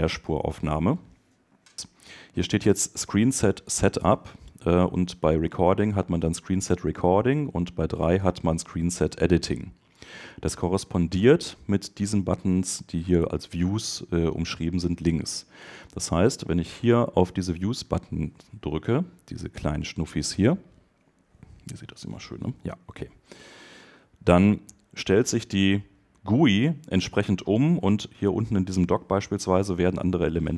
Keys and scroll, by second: 1.1 super+BackSpace.